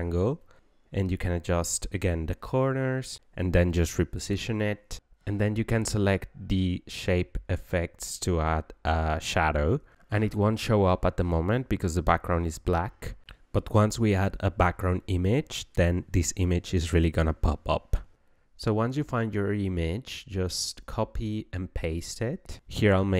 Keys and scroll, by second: 17.0-18.5 typing.